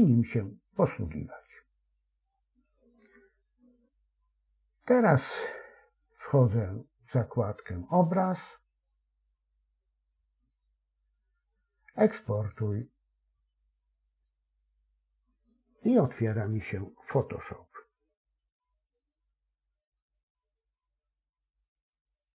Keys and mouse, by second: 8.8-14.2 drag.